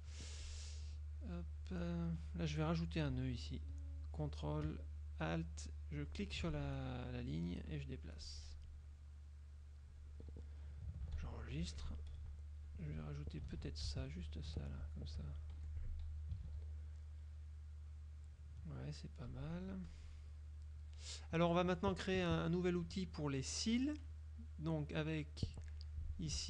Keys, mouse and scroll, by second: 1.7 click, 6.2 ctrl+alt+click, 6.6 ctrl+alt+click, 7.4-8.9 drag, 9.6 click, 11.2 ctrl+s, 11.7 ctrl+F6, 12.8 shift+click, 13.7 ctrl+z, 14.1 ctrl+shift+click, 14.6 shift+click, 15.6 shift+F1, 15.9 click, 16.6 ctrl+s, 17.0 ctrl+click, 19.4 z, 20.0 click, 20.8 click, 24.2-25.7 drag, 26.2-26.4 ctrl+drag.